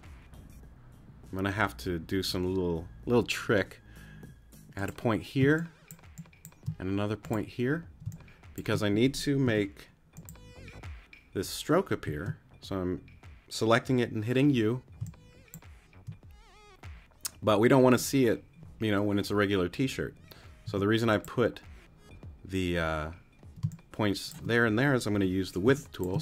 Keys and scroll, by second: 5.4 space, 8.0 space, 9.4 u, 12.0 space, 15.0 space, 20.6 t, 23.6 space, 25.1 w, 25.6 space.